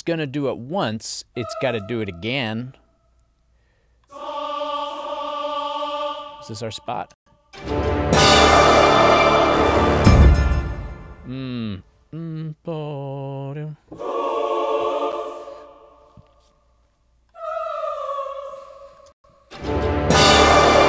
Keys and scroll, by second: 7.2 space, 10.2 space, 19.2 space.